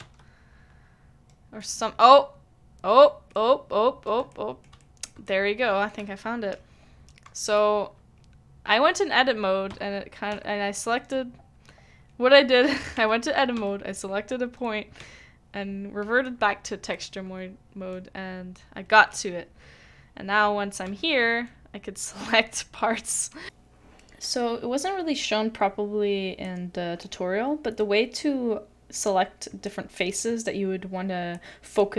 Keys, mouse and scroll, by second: 0.0 Tab, 0.0 Tab, 4.3 shift+middle click, 4.8 shift+middle click, 5.2 shift+middle click, 9.7 Tab, 10.3 Tab, 12.9 Tab, 13.5 Tab, 15.0 Tab, 16.9 middle click.